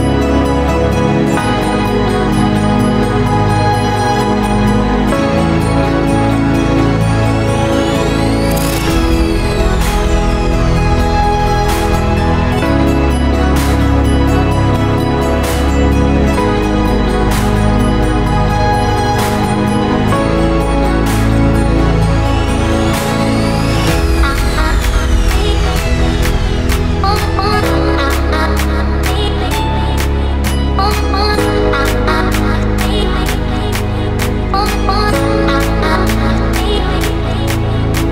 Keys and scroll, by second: 11.5 ctrl+z, 13.6 ctrl+z, 17.1 ctrl+z, 21.5 ctrl+z, 24.6 ctrl+z, 26.1 ctrl+z, 27.5 ctrl+z, 30.6 ctrl+z.